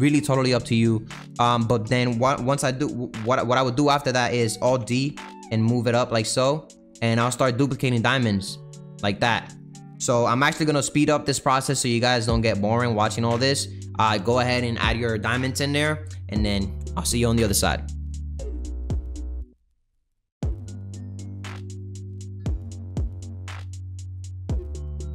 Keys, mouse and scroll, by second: 0.5 click, 1.2 click, 1.6 shift+click, 4.6 alt+d, 8.2 shift+click, 8.5 shift+click, 8.8 shift+click, 9.2 shift+click, 10.0 alt+d, 18.3 alt+d, 19.0 shift+Left, 19.3-20.4 typing, 21.0 Left, 21.2 click, 21.3 alt+d, 21.6 Left, 21.8 Left, 22.0 alt+d, 22.3 alt+d, 22.6 shift+Left, 22.7 shift+Left, 22.7 shift+Left, 22.7 shift+Left, 22.8 alt+d, 23.1 click, 23.3 alt+d, 23.4-24.2 typing, 23.6 alt+d, 24.4 click, 24.5 alt+d, 24.6 alt+d, 24.9 alt+d, 25.0 alt+d.